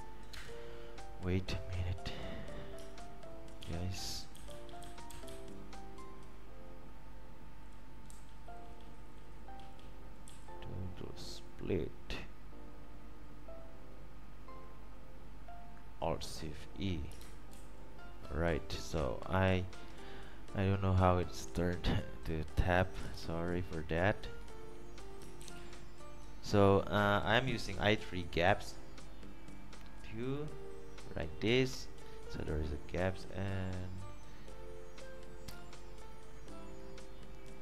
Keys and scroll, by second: 0.5 Return, 3.8 alt+8, 4.5 Down, 4.7 Down, 4.8-5.3 Down, 6.1 Right, 6.2 Down, 7.1 typing, 17.8 alt+e, 23.3 alt+F4, 25.6 super+f.